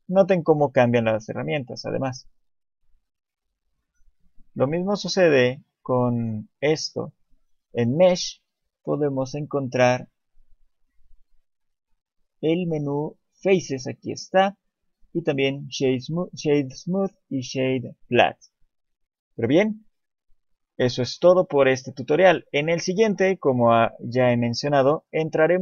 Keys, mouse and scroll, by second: 1.9 click, 5.6 click, 18.9 click, 19.6 Tab, 20.1 scroll down 1, 20.8-21.2 scroll down 4, 22.2 click, 22.2 scroll up 1, 22.8 shift+middle click, 24.2 shift+middle click, 25.1 shift+middle click.